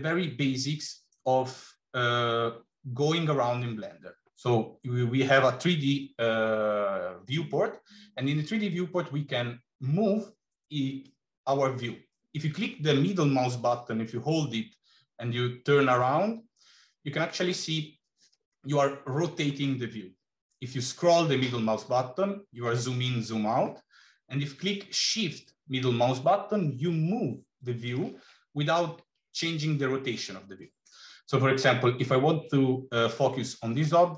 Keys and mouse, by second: 10.9-19.3 middle drag, 25.3-28.0 shift+middle drag.